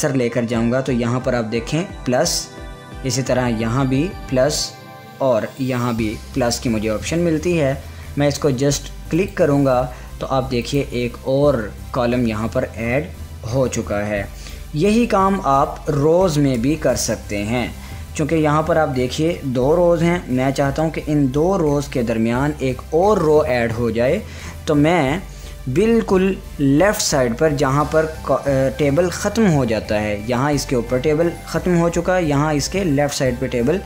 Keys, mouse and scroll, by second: 9.7 click, 15.2 `, 17.8 Tab.